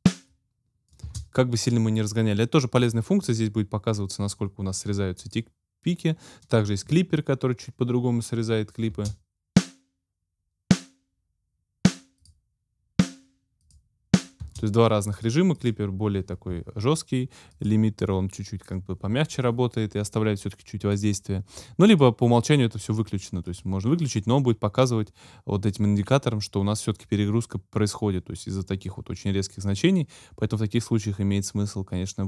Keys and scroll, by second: 1.1 space, 8.9 space, 14.4 space.